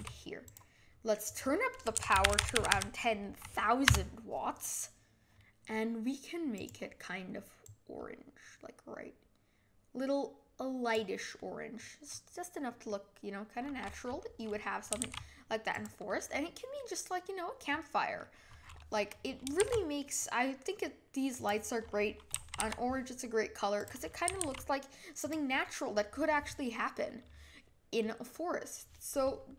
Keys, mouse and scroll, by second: 1.3-3.8 drag, 3.8 KP_0, 7.6 click, 11.4-14.9 middle drag, 14.9 g, 16.0-19.2 middle drag, 19.6 shift+d, 22.4 g, 24.3 g, 25.6-29.5 middle drag.